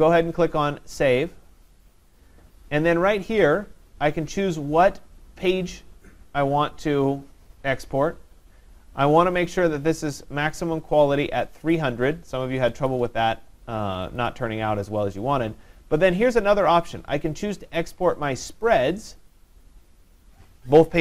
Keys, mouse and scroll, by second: 1.2 click, 9.5 click, 10.6 click, 11.9 click, 12.3-13.4 typing, 14.2 click, 15.2 click, 18.7 click.